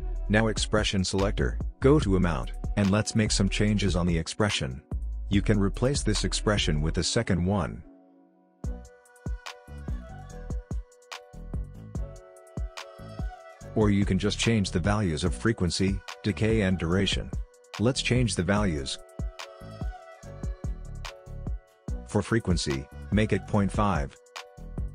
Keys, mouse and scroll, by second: 1.3-13.3 drag, 18.8-20.9 drag.